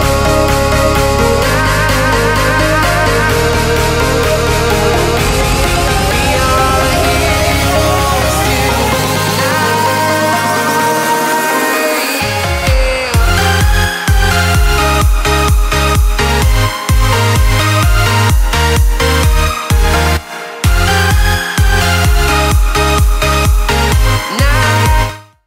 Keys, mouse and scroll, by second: 0.8 right click, 1.3-1.7 scroll down 1, 1.7 click, 1.9 scroll down 1, 2.0 right click, 2.4-2.7 scroll up 1, 3.9 click, 5.0 scroll down 1, 5.3 right click, 5.8-6.1 scroll up 1, 6.4 shift+click, 7.8 right click, 8.5 click, 9.0 scroll down 1, 10.7 right click, 10.9 scroll down 1, 11.9 click, 13.2-13.6 scroll down 1, 13.6 right click, 14.0 shift+right click, 14.6 scroll down 1, 15.0 scroll up 1, 15.0 shift+right click, 15.8-16.2 scroll down 1, 16.6 right click, 17.3 right click, 18.0-20.4 ctrl+right drag, 20.4 right click, 21.1-21.5 scroll down 1, 21.5 right click.